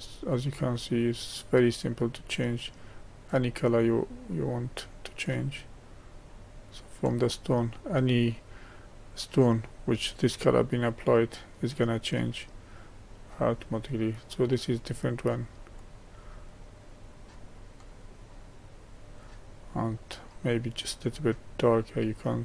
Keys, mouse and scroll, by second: 11.8-14.4 middle drag, 14.4 click, 17.3 click.